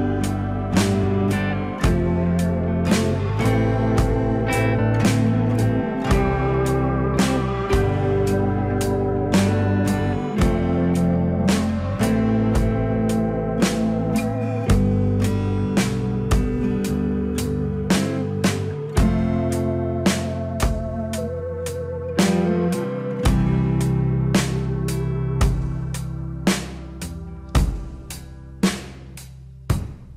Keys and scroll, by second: 19.9 F3, 27.7 F3.